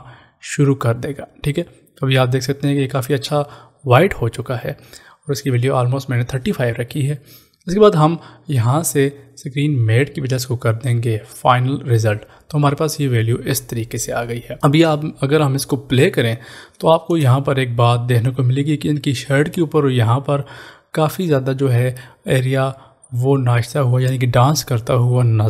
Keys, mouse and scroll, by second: 9.8 click, 16.0 click, 17.3 space.